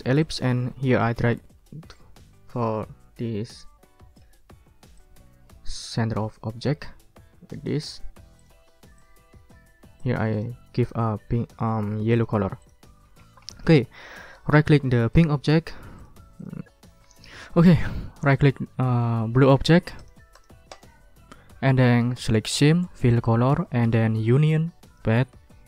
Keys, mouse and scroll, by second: 0.2-4.3 ctrl+drag, 4.5 ctrl+scroll up 2, 5.0-6.5 ctrl+drag, 8.4 click, 9.0 click, 10.0 click, 12.1 click, 12.6 click, 13.2 ctrl+scroll down 2, 13.5 ctrl+click, 15.1 click, 16.0 click, 16.4 click, 19.2 right click, 20.0 click, 20.3 click, 20.7 right click, 23.1 click, 23.7 click, 24.8 click.